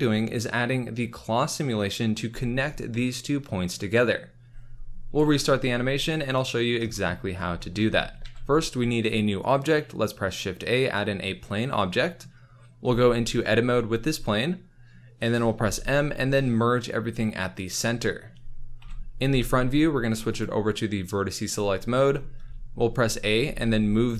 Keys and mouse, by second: 6.1 click, 8.2 shift+a, 13.1 Tab, 15.6 m, 18.7 KP_1, 20.4 click, 21.7 z, 22.5 g, 22.5 a, 23.5 g.